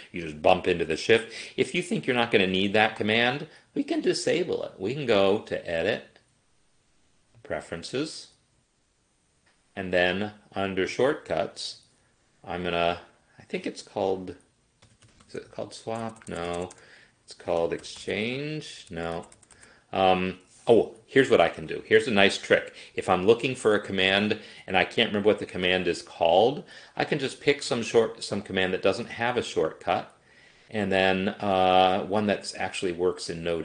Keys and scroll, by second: 14.7-19.6 typing.